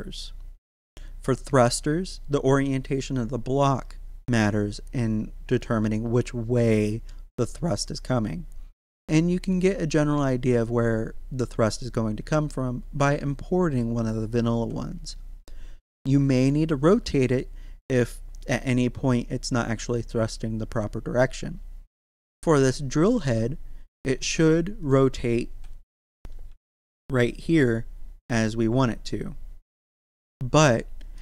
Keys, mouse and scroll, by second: 24.2 shift+s, 24.8 click, 25.5-26.5 typing, 31.0 right click.